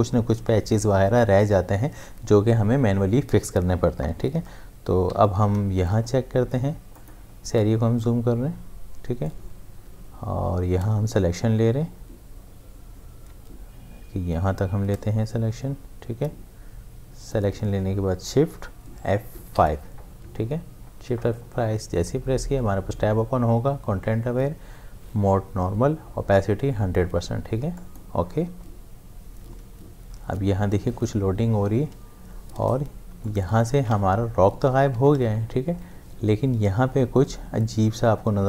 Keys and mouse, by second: 5.1 m, 5.6 space, 5.9 click, 6.1 space, 7.0 ctrl+click, 9.3 click, 9.9 space, 19.5 shift+F5, 27.7 click, 32.0 click, 32.6 space, 33.2 ctrl+alt+click, 35.0 ctrl+d, 35.2 v.